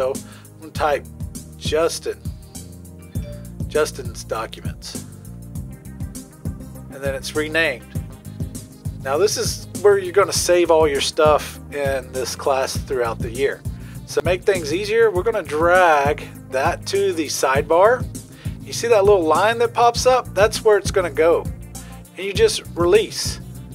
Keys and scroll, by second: 0.7-3.7 typing.